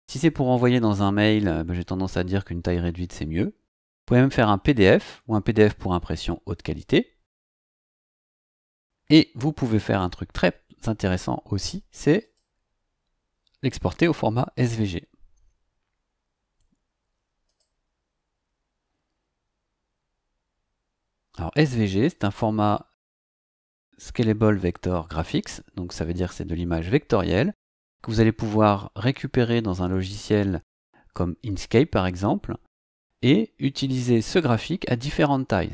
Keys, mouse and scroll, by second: 12.2 click, 17.4 click.